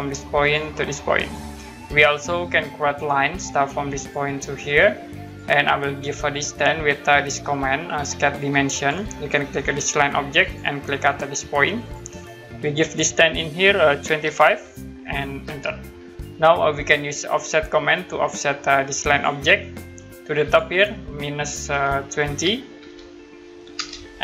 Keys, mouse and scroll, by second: 0.4 click, 4.0 click, 8.7 click, 10.4 click, 15.4 Return, 17.3 click, 19.1 click, 21.7 -, 23.7 Return.